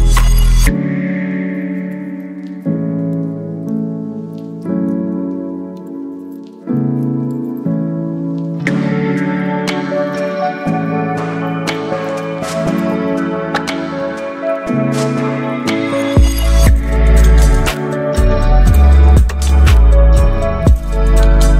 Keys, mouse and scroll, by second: 0.0-1.6 typing, 3.1 shift+click, 4.6 ctrl+t, 6.8-8.7 drag, 8.7-12.5 drag, 16.1 click.